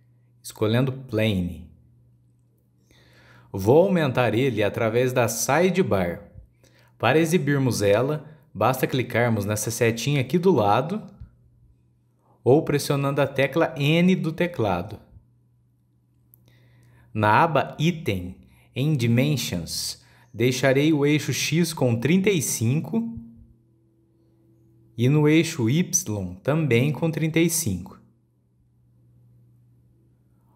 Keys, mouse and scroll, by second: 11.9-14.8 drag, 14.8 n, 15.6 n, 19.1 click, 22.2-25.4 drag, 30.4-30.5 scroll down 9.